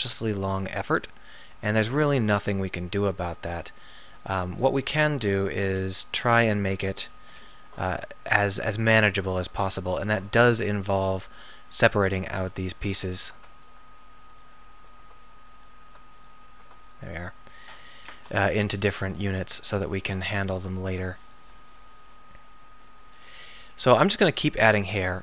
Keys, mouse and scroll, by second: 3.1 s, 4.3-5.7 drag, 5.7 KP_7, 7.3 p, 9.5 Tab, 10.0 Tab, 10.8-18.2 Tab, 18.2 KP_7, 19.4 r, 20.7 g, 23.2 r, 24.3 g.